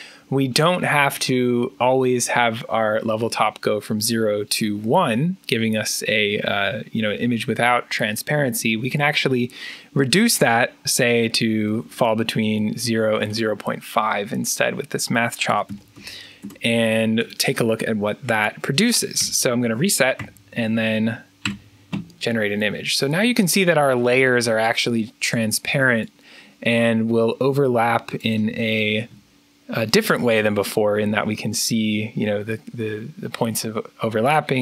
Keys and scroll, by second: 15.1-16.3 typing, 18.5-20.0 typing, 21.3-24.6 typing, 28.7 3.